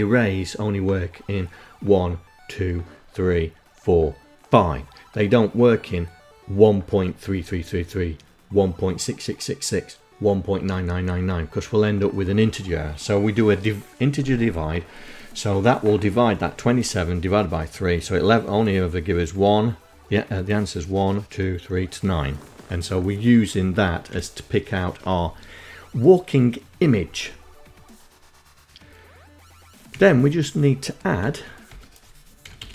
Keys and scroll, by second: 22.6 End, 28.4 Down, 29.7 Tab, 30.2 Tab, 30.7-31.7 typing.